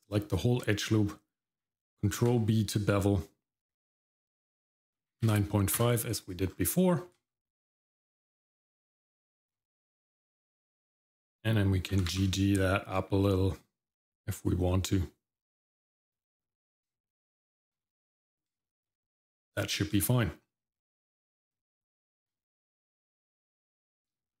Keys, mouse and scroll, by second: 0.9 middle click, 2.2 ctrl+b, 6.5-6.9 scroll down 2, 6.9 shift+middle click, 7.4-7.9 scroll up 1, 7.9 middle click, 9.0 shift+middle click, 9.7 scroll up 1, 10.0 middle click, 10.3-10.7 scroll up 1, 10.7 middle click, 11.9 g, 16.4 scroll down 1, 16.8 shift+middle click, 17.3 shift+middle click, 17.8 middle click, 18.2 scroll down 1, 18.6 shift+middle click, 19.0 middle click, 20.0 shift+middle click, 21.7 shift+middle click, 22.6-23.9 scroll up 1, 23.9 middle click, 24.3-24.4 scroll down 1.